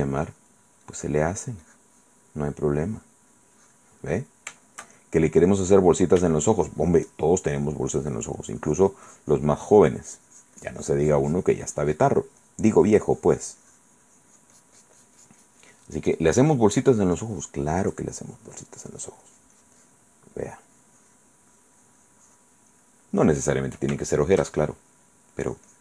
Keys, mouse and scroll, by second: 1.0-3.0 drag, 3.1 click, 4.3 middle click, 4.7 shift+click, 4.7 shift+middle click, 4.9 shift+click, 5.9 shift+click, 7.3 click, 8.0 click, 8.6-12.5 drag, 12.6-15.9 drag, 16.3 click, 17.4 click, 18.7-20.3 drag, 20.6-22.8 drag, 23.1 click, 24.2 shift+click, 25.7 click.